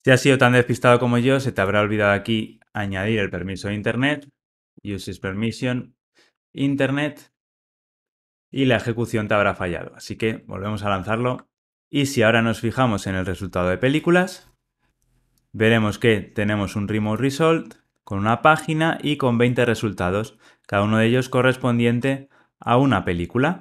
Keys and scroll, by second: 5.5 Return.